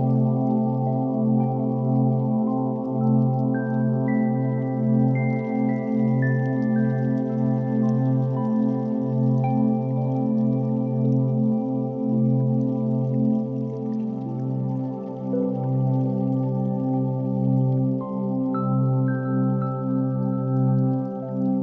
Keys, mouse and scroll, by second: 0.7 click, 1.9-2.5 drag, 3.1-3.6 shift+drag, 4.0 g, 4.2 x, 4.7 drag, 5.0 s, 5.7 click, 6.4 s, 7.3 click, 7.5 g, 7.6 x, 10.1 click, 10.7 r, 11.0 x, 13.6 click, 14.4 r, 14.6 z, 16.9 click, 17.3 r, 20.1 click, 20.3-21.6 typing, 21.1 click.